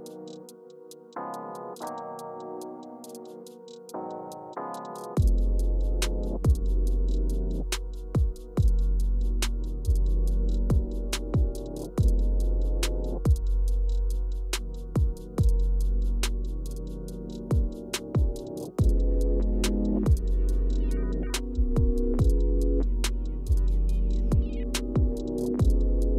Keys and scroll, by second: 1.5 Page_Down, 1.7 Page_Down, 18.7 Return.